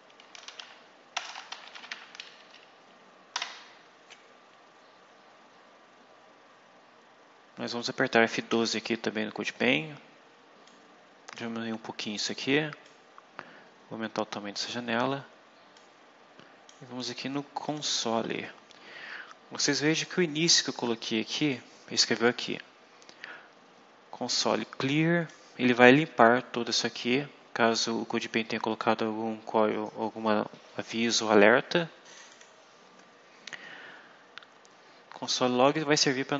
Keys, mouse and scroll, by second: 0.0-3.2 typing, 2.3 End, 8.4 F12, 10.6 click, 12.7-14.6 drag, 15.6-16.8 drag, 17.6 click, 20.4-21.6 drag, 24.4 click, 32.2 click, 35.6-36.3 drag.